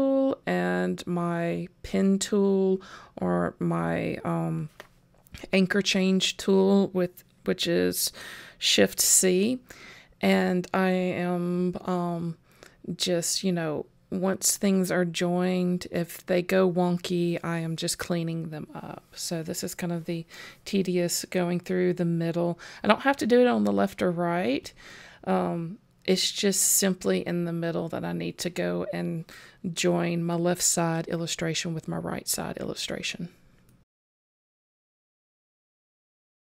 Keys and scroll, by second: 3.0 super+j, 9.9 super+j, 14.9 super+j, 19.5 super+j, 31.9 super+j, 34.6 super+j.